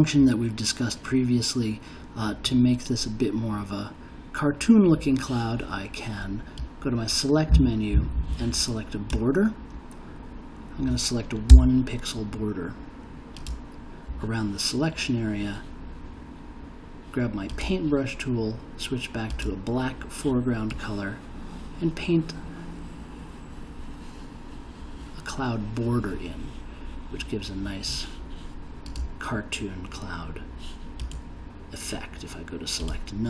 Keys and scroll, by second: 11.5 1.